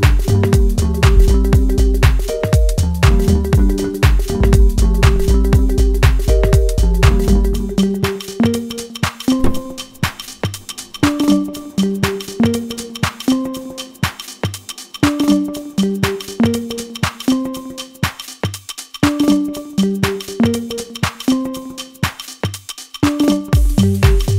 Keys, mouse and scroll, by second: 7.1 click, 7.8 middle click, 8.9 scroll down 1, 9.9 shift+middle click, 10.7-11.1 scroll down 1, 11.1-13.5 middle drag, 13.5-20.2 drag, 20.3-24.3 drag.